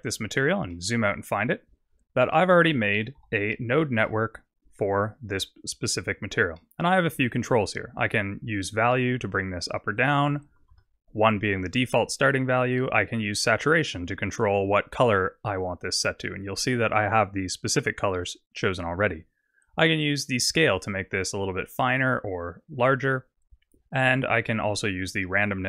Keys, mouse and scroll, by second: 0.4 scroll down 5, 0.7 middle click, 1.9 scroll up 6, 2.3 middle click, 3.2 n, 3.6-5.0 scroll up 1, 5.0-6.2 scroll up 3, 6.6 middle click, 7.1 scroll up 4, 8.7 click, 9.9 click, 13.1 click, 19.2 click, 24.4 click.